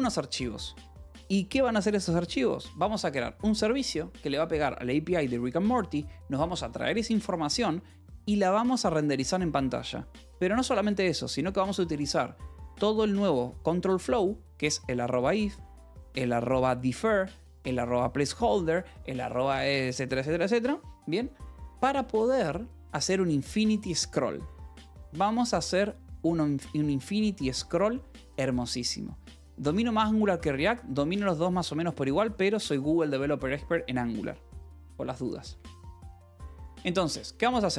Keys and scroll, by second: 34.9 j, 35.8 k, 36.4 j.